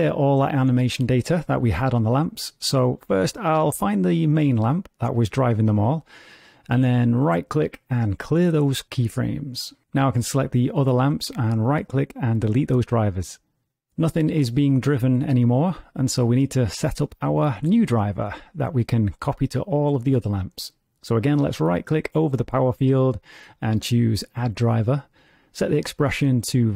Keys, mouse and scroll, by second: 0.6 click, 3.3 click, 8.3 right click, 11.0 click, 11.8 right click, 13.9 click, 14.7 right click, 21.1 click, 22.8 right click.